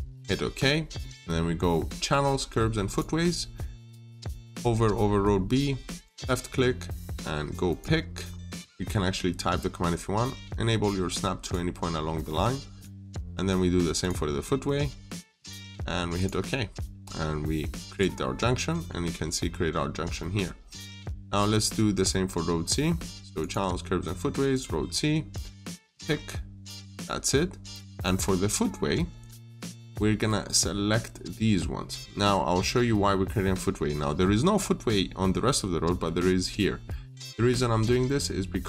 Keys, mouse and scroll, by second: 0.0 click, 0.4 scroll down 1, 0.5 middle click, 2.7 click, 8.1-8.9 scroll up 1, 11.2 click, 18.2 scroll down 1, 18.5 middle click, 18.9 scroll up 1, 19.8 scroll down 1, 20.0 middle click, 20.4 scroll down 1, 20.8-23.2 scroll up 1, 23.2 click, 25.9-26.2 scroll up 1, 26.8 click, 30.3 scroll up 1.